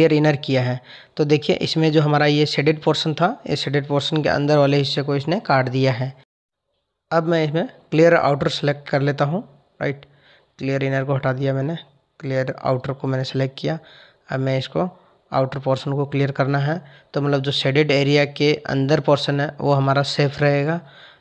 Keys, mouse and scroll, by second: 1.2 click, 7.7 ctrl+z, 9.5 click, 10.5 click, 16.2 click.